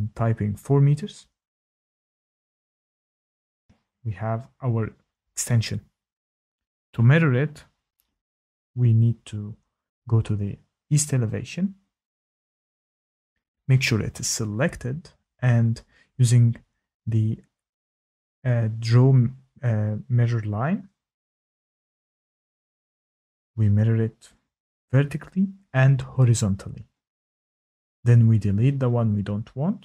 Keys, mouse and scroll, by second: 0.5 Return, 2.5 click, 2.5 typing, 3.8 click, 8.3 shift+middle click, 11.2 click, 11.5 click, 12.7 click, 13.2 Escape, 13.2 click, 16.4 click, 17.8 click, 19.0 click, 22.8 click, 24.6 click, 26.2 click, 27.9 Escape, 28.9 click, 29.5 Delete.